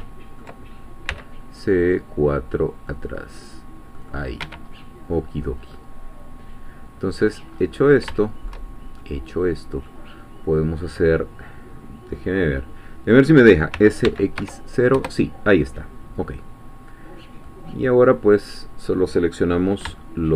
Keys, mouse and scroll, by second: 0.0 ctrl+middle click, 1.1 c, 2.9 middle click, 3.9 middle click, 4.5 Escape, 4.7-5.1 scroll down 1, 5.4 scroll down 1, 5.7-7.5 middle drag, 7.5-8.1 scroll up 1, 8.2-10.1 shift+middle drag, 13.7 s, 14.1 x, 14.4 0, 14.9 Return, 17.5 middle click, 19.3-20.3 middle drag.